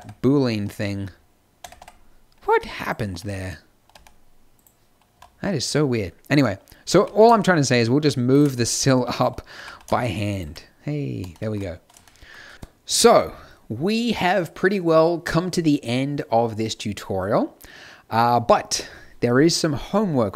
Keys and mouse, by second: 0.4 z, 0.8 z, 1.5 Tab, 1.7 Tab, 5.1 a, 6.9 g, 9.1 click, 9.4 g.